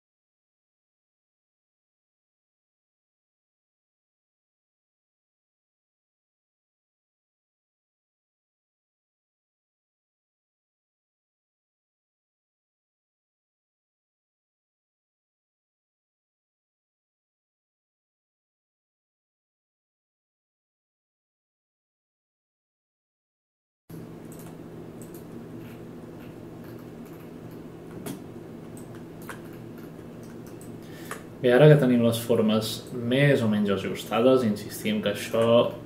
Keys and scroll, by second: 27.9 space.